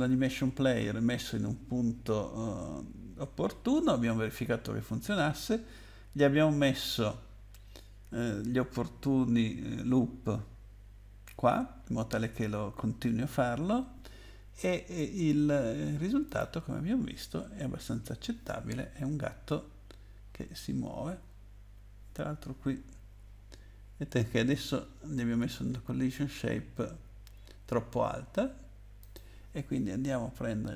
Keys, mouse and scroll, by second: 16.3 click, 21.2 w, 23.2 Up, 24.1 Down, 26.2 Down, 26.8 Up, 29.0 click.